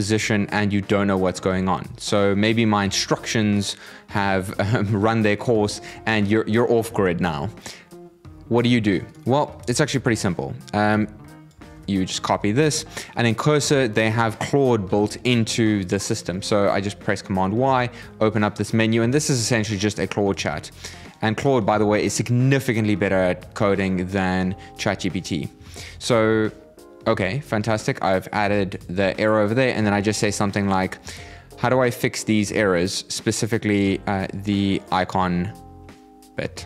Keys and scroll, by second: 11.3 super+c, 14.5 super+y, 23.4 super+v, 24.7 super+Up, 25.4 shift+Return, 30.4 alt+space, 36.5 alt+space.